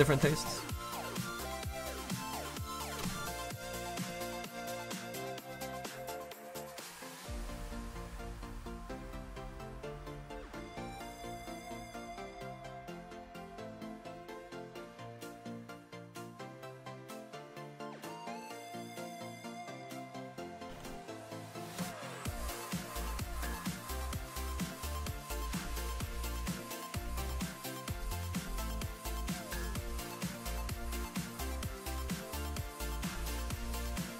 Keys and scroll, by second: 34.0 ctrl+z.